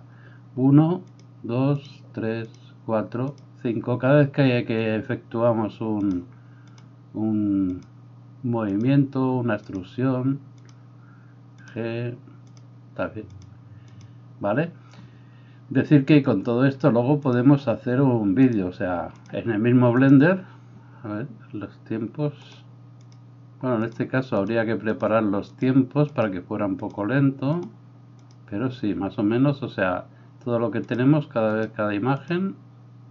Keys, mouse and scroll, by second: 1.2 e, 1.2 g, 2.5 e, 2.5 s, 3.4 g, 6.2 g, 6.2 e, 7.9 right click, 8.8-14.0 middle drag, 8.8 e, 8.8 s, 9.7 e, 10.7 g, 11.8 e, 12.6 s, 13.5 g, 14.0-33.1 drag.